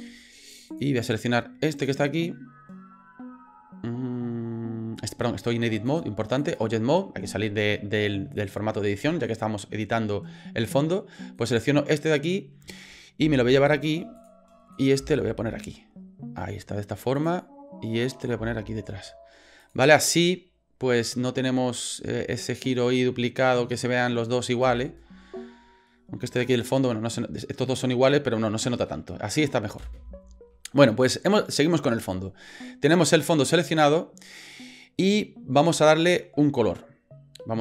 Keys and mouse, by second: 0.7 click, 1.6 right click, 5.9 click, 11.4 right click, 13.2 g, 14.7 right click, 15.0 g, 18.1 right click, 18.4 g, 24.7 space, 29.9 space, 32.1 middle click, 32.9 right click.